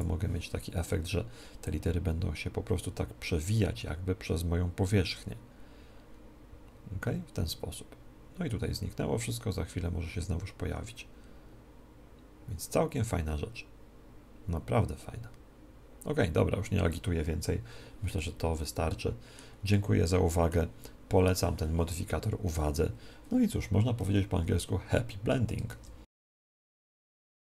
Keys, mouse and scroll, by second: 18.3-21.6 middle drag.